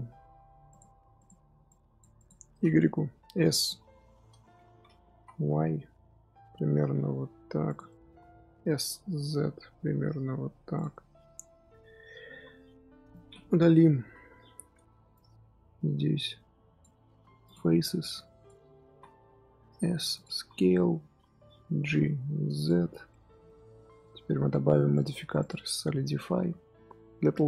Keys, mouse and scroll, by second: 0.6 click, 1.1-2.8 drag, 2.8 d, 5.0 s, 7.8 middle click, 8.6 s, 10.8-12.2 middle drag, 12.2 z, 12.5-13.5 middle drag, 13.5 KP_3, 13.9 KP_1, 14.2-15.0 scroll up 3, 15.0 click, 17.0-20.3 typing, 18.0 click, 21.7 g, 22.8 z, 23.0 middle click, 23.5 z, 24.0 Tab, 24.8 click.